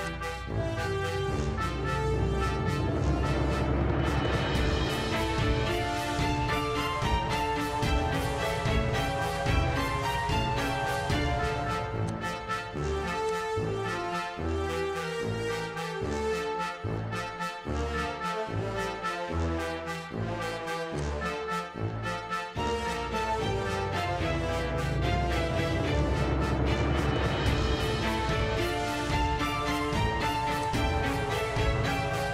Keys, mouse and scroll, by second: 0.1 click, 1.9 i, 5.0 click, 9.6 i, 10.9 i, 12.1 click, 13.3 click, 13.9 2, 14.9 BackSpace, 15.7 -, 16.8-17.9 typing, 21.0 click, 22.9 click, 29.8 click, 30.7 click.